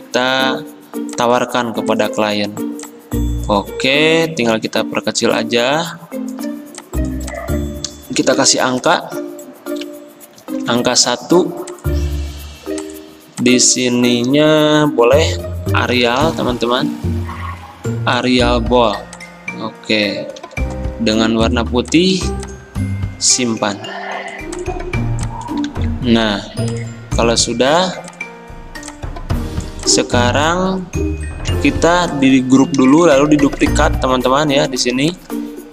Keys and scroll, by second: 4.6 ctrl+g, 8.4 t, 9.9 1, 10.7 ctrl+a, 15.8 ctrl+a, 15.8-16.8 typing, 20.4 d, 25.7 ctrl+z, 31.5 ctrl+g.